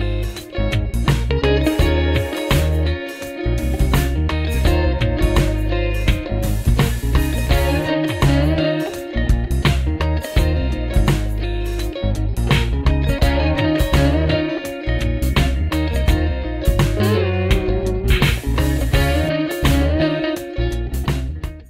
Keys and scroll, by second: 1.5 w, 3.0 space, 3.2 e, 5.0 ctrl+z, 5.3 a, 7.2 w, 8.1 ctrl+alt+x, 8.7 g, 9.2 p.